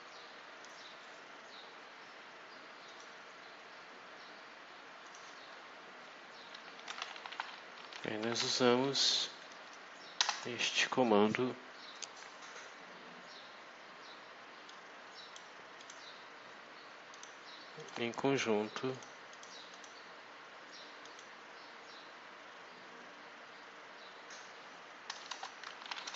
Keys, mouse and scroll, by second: 0.5 click, 2.8 click, 4.9 click, 6.4-8.9 typing, 9.3 Down, 10.1 Return, 14.5 click, 15.7 click, 17.0 click, 17.7 click, 18.8 click, 19.2 click, 19.6 click, 20.9 click, 25.2 Return, 25.3-26.1 typing.